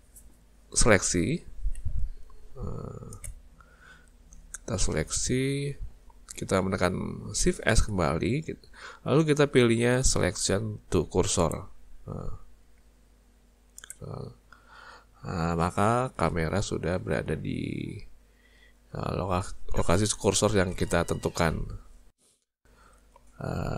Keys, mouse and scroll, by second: 1.8 z, 7.7 shift+s, 12.8 z, 15.6 scroll up 1.